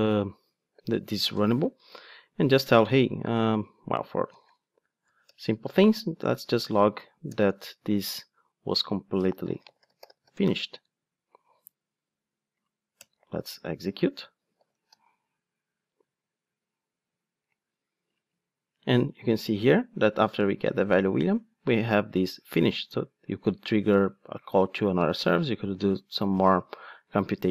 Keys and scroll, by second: 5.1 Return, 14.6 ctrl+shift+d.